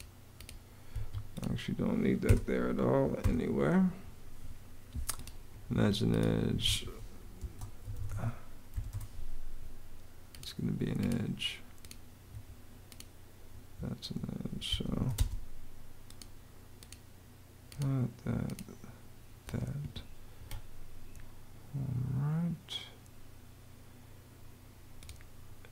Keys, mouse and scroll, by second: 0.7 Escape, 2.1-3.0 typing, 5.5 Escape, 7.0-8.5 typing, 8.7 Return, 12.1 Escape, 13.3 Escape, 14.3-15.2 typing, 20.2 Escape.